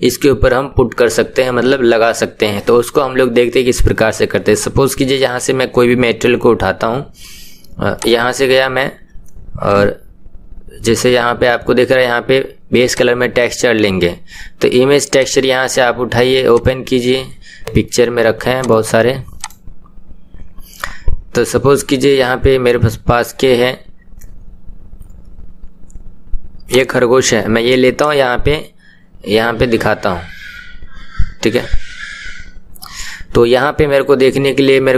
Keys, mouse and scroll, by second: 15.2-28.3 drag, 31.5 scroll down 4.